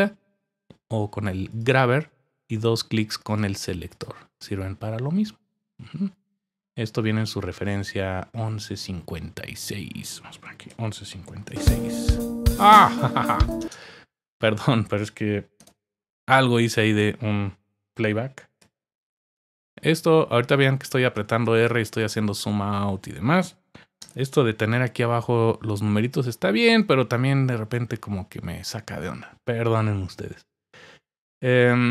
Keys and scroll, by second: 10.4-12.0 typing, 13.6 typing, 18.6-19.3 typing, 20.4 typing.